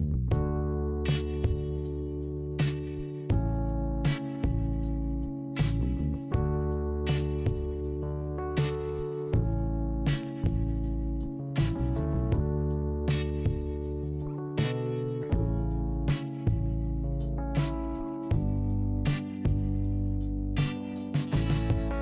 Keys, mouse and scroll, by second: 1.3 click, 1.4 click, 1.7 click, 1.7 double click, 2.1-2.8 scroll down 2, 2.8 click, 2.9 click, 3.5 click, 3.6 click, 4.9 click, 4.9 click, 5.8 click, 5.9 click, 9.6 scroll up 1, 10.6 click, 13.0 click, 13.1 click, 14.0 click, 14.1 click, 14.8 click, 15.1 scroll down 2, 15.7 click, 15.7 click, 18.3 click, 18.4 click, 18.8-19.4 scroll down 3, 18.9 click, 21.5 click, 21.6 click.